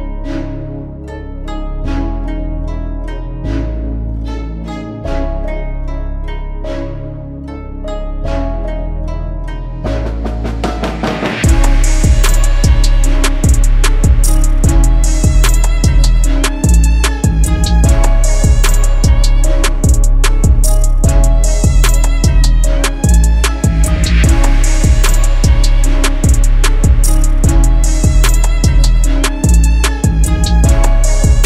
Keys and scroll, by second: 14.2 shift+l, 14.5 shift+l.